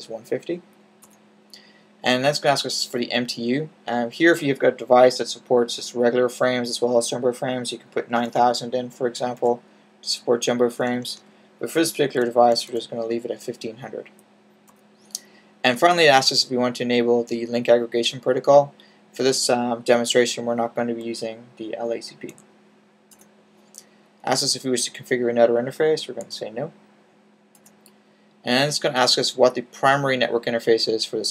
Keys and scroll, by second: 8.1-9.3 typing, 10.7-12.6 typing, 22.2 n, 25.3 typing.